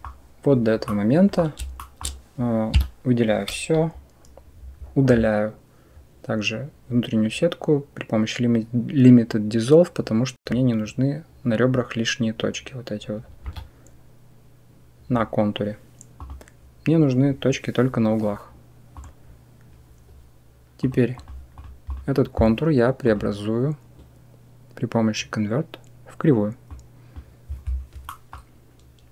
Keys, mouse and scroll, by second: 0.7 click, 1.6 shift+click, 2.6 a, 13.3 Delete, 20.7 click, 22.9-27.0 drag, 27.9 middle drag.